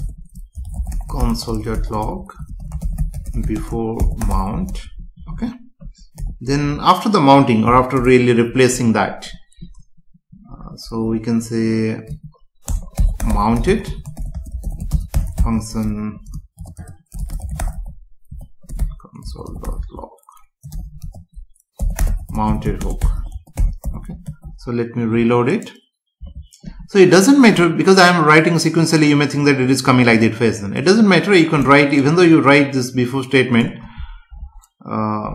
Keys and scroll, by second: 0.0 Return, 3.5 space, 5.1 Right, 6.6 Down, 8.0 Return, 12.7 BackSpace, 14.3 space, 16.8 Return, 18.7 BackSpace, 22.8 space, 24.3 ctrl+s, 26.2 F5, 34.8 alt+Up.